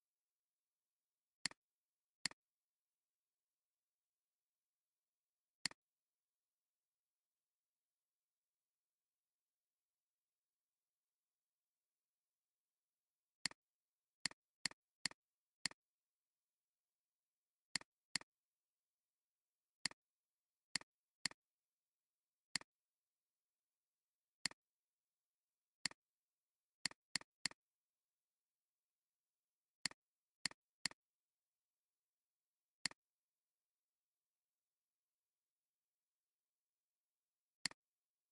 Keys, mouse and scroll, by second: 14.5 double click, 15.6 right click, 17.8 right click, 18.2 double click, 19.1 alt+scroll up 1, 19.5 alt+scroll down 1, 19.7 space, 20.3 alt+scroll up 2, 21.0 alt+space, 21.0 scroll up 1, 27.1 double click, 27.3 space, 27.4 double click, 29.4 alt+scroll down 1, 29.8 space, 30.6 alt+scroll down 1, 30.8 shift+click, 37.5 click.